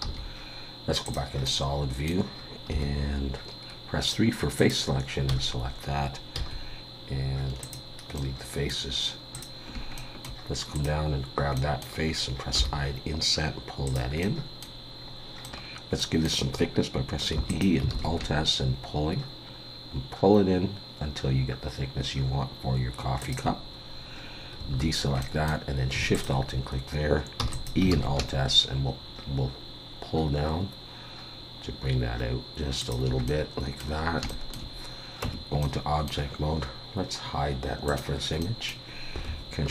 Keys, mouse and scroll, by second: 0.1 z, 1.4 middle click, 2.7 3, 4.6 click, 6.3 x, 8.1 middle click, 9.3 click, 9.9 shift+middle click, 10.7 click, 11.5 middle click, 12.5 i, 14.2 middle click, 15.0 scroll down 2, 15.4 middle click, 15.7 scroll up 1, 16.0 middle click, 17.3 e, 17.9 alt+s, 24.7 alt+a, 25.2 middle click, 26.1 alt+shift+click, 27.4 e, 27.9 alt+s, 33.2 middle click, 34.0 scroll down 1, 34.3 shift+middle click, 35.2 Tab, 35.6 middle click, 37.9 click, 38.4 middle click.